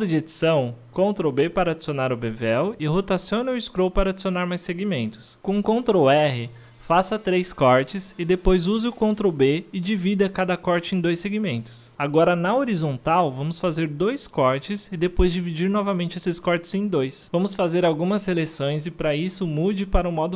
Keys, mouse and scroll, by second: 0.3 Tab, 2.3 ctrl+b, 7.8 ctrl+r, 8.6 middle click, 9.0 ctrl+b, 10.7-11.2 middle drag, 11.2 ctrl+r, 12.0 middle click, 12.2 ctrl+b, 12.8-13.5 middle drag, 13.5 ctrl+r, 14.0-14.4 middle drag, 14.4 ctrl+b, 15.6-16.5 middle drag, 16.5 w, 16.7-17.7 middle drag, 17.7 3, 17.9-18.3 drag, 18.3-18.7 shift+middle drag, 18.7-19.1 shift+drag, 19.1 scroll down 1, 19.2-20.0 shift+middle drag, 20.0-20.3 shift+drag.